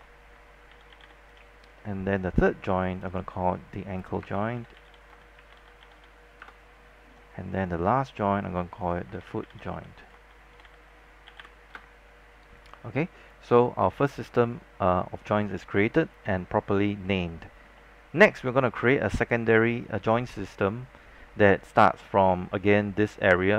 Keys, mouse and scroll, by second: 0.0-1.8 typing, 3.1 click, 4.2-6.7 typing, 7.9 click, 9.1-11.5 typing, 11.9 Return, 13.6 click, 17.6 scroll down 1, 17.8 alt+middle click, 18.4 scroll down 1, 18.6 alt+middle click, 19.1 scroll up 1, 19.7-21.1 alt+middle drag, 22.6 scroll down 1, 22.9 alt+middle click.